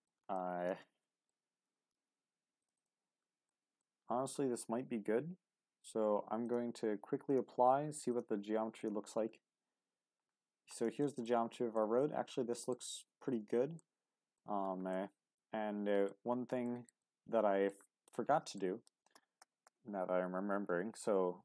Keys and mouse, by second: 0.3-1.3 middle drag, 2.8 click, 3.5 middle click, 6.4-9.3 drag, 9.3 Tab, 11.0 shift+middle click, 11.7-12.7 middle drag, 13.4 a, 13.8 middle click, 14.5 Tab, 15.0-16.1 middle drag, 16.7 shift+middle click, 17.0-17.7 middle drag, 18.2-18.6 middle drag, 18.9-20.5 ctrl+z.